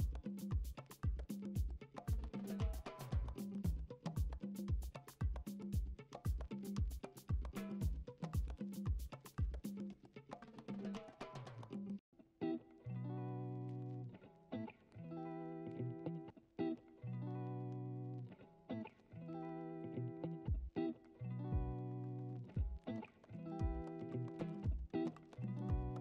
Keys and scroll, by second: 4.7 ctrl+z, 12.9 ctrl+z, 14.7 ctrl+z, 16.9 ctrl+alt+z, 17.0 ctrl+alt+z, 17.1 ctrl+alt+z, 18.3 ctrl+d, 23.4 2, 25.3 1.